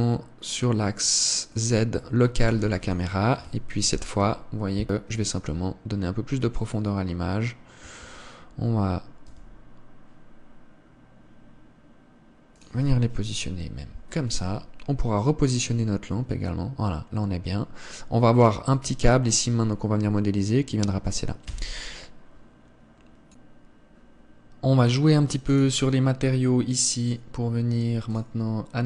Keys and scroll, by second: 3.0 ctrl+s, 8.4 Escape, 9.8 g, 22.1 Escape.